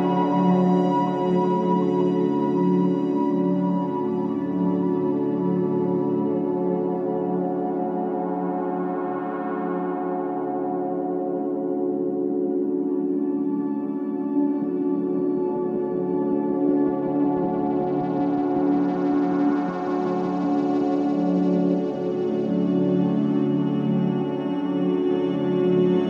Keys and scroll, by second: 4.0 2, 6.5 f, 19.6 4, 20.1 3, 21.8 Delete, 22.3 ], 24.0 4.